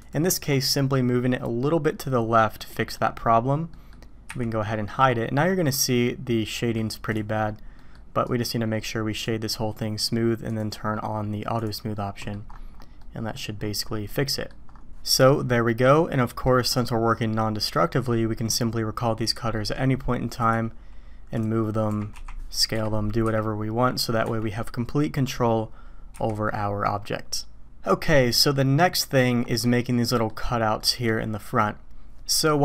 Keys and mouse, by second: 2.6-2.9 drag, 3.7 click, 4.3 h, 4.6-6.8 drag, 7.1 middle click, 7.7 right drag, 8.2 right click, 10.5-11.6 drag, 11.9-12.3 drag, 13.0-13.3 middle drag, 14.1-14.5 middle drag, 15.7-16.4 middle drag, 20.4 click, 21.3-21.9 drag, 21.9 g, 23.2 s, 26.1 h, 27.8-29.2 drag, 30.2 click, 30.9 click.